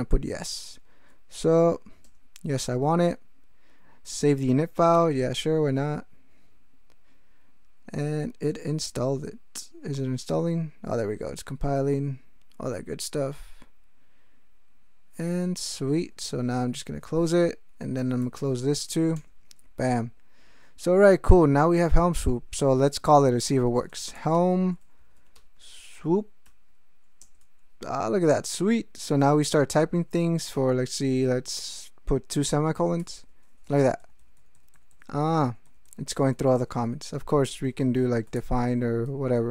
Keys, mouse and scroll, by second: 2.0 Return, 4.9 y, 15.7 ctrl+x, 16.0 ctrl+o, 16.7 q, 18.0 ctrl+x, 18.2 ctrl+k, 19.1 Return, 23.5 alt+x, 23.9 alt+h, 24.0 alt+e, 24.1 alt+l, 24.1 alt+m, 24.3 alt+Tab, 24.7-26.0 typing, 26.4 Tab, 27.2 Return, 33.0 ;, 33.8 ctrl+n, 37.6-39.4 typing.